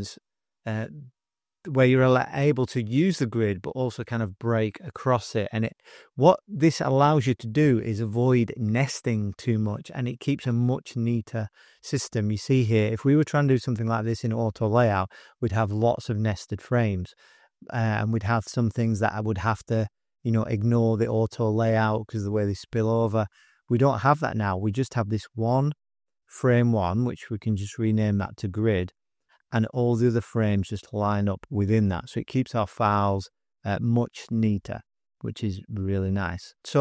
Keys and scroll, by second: 27.1-28.6 typing, 36.6 typing.